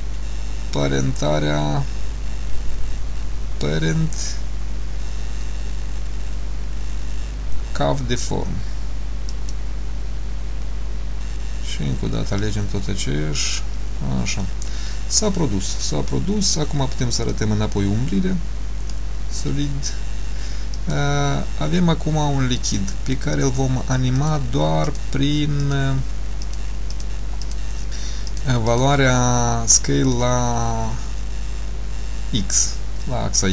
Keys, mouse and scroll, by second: 17.5 click, 20.9 click, 24.3 click, 25.0 click, 26.5 click, 28.4 click, 30.3 click.